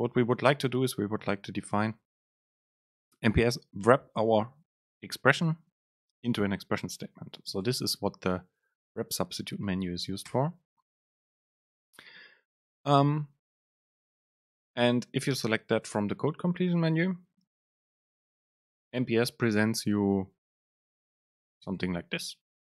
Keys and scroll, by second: 21.0 Down, 21.4 Up, 21.9 Down.